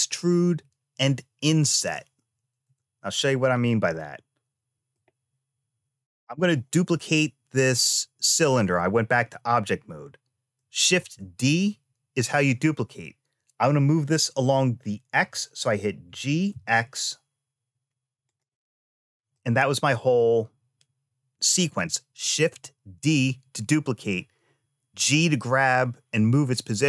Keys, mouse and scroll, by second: 2.4 Tab, 3.2-3.7 scroll down 1, 3.7 middle click, 10.7 shift+d, 19.1 middle click, 21.4 click.